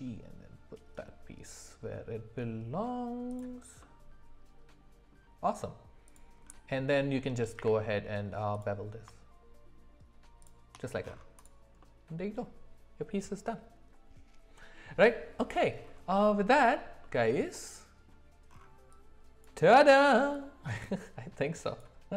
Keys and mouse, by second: 3.8-5.1 middle drag, 6.1 click, 7.6 q, 11.4 click, 11.8 middle click, 16.3-16.6 shift+middle drag, 17.0-18.1 middle drag.